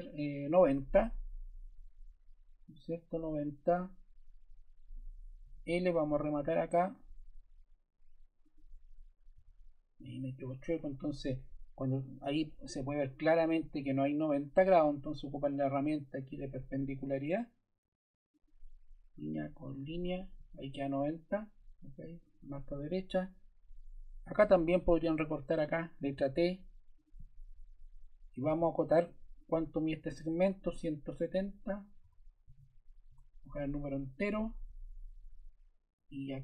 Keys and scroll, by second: 0.4 Return, 5.4 l, 9.3 Escape, 26.0 t, 28.5 d, 32.0 1, 32.4 0, 33.0 Return.